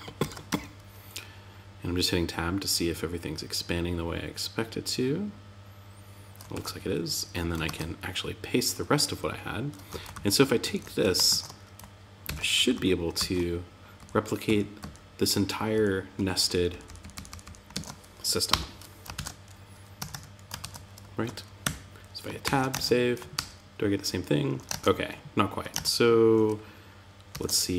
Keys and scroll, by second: 5.9 super+z, 7.0 super+v, 9.2 Up, 9.5 super+Left, 10.0 shift+super+Right, 10.6 shift+super+Right, 11.6 super+x, 11.9 Up, 12.5 super+Left, 13.3 Down, 14.7 Right, 15.9 shift+Down, 17.1 shift+super+Right, 18.5 shift+super+t, 19.3 Tab, 20.0 super+v, 21.0 Tab, 21.8 super+s, 22.1 super+Tab, 22.7 super+r, 24.0 super+Tab, 26.7 alt+super+j.